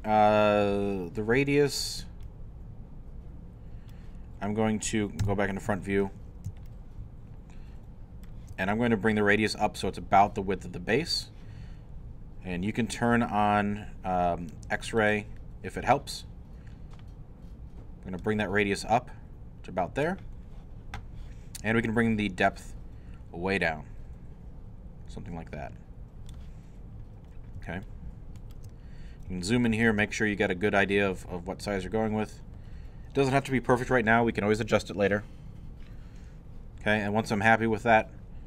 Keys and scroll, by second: 5.2 i.